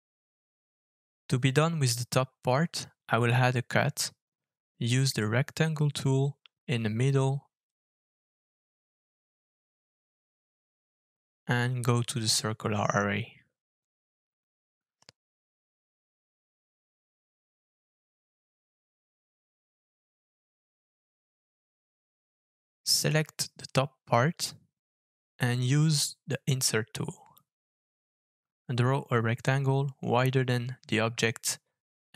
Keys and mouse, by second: 2.0 alt+f, 6.7-24.9 shift+middle drag, 25.1-26.2 middle drag, 26.4 middle click, 27.4 alt+f.